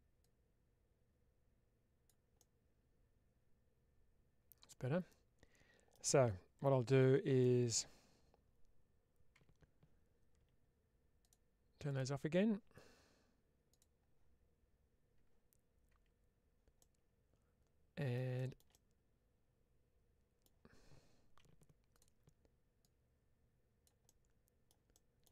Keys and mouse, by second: 0.1-1.9 drag, 2.2-5.8 middle drag, 6.8 KP_Divide, 7.4 middle click, 9.5 Tab, 11.2 click, 11.9 click, 16.7-18.0 middle drag, 18.6-20.3 middle drag, 21.3 1, 21.8 click, 22.7-23.7 drag, 23.9 middle click, 24.8 middle click.